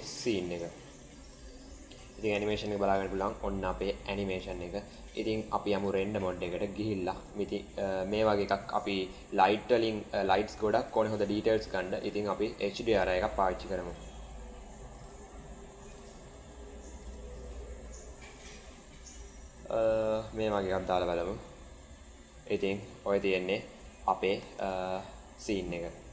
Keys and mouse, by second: 1.3 click, 2.3 space, 4.3 space, 5.8 click, 7.1 drag, 10.8-12.3 drag, 12.9 click, 24.2 space.